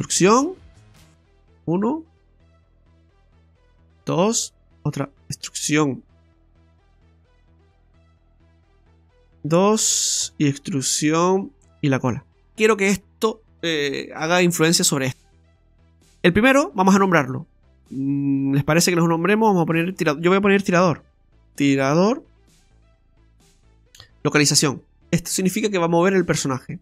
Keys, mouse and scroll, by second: 3.6 y, 5.0 right click, 5.4 y, 6.2 right click, 7.5 e, 10.2 e, 12.5 shift+middle click, 12.5 scroll up 2, 16.2 right click, 18.8 click, 19.6 click, 22.6 BackSpace.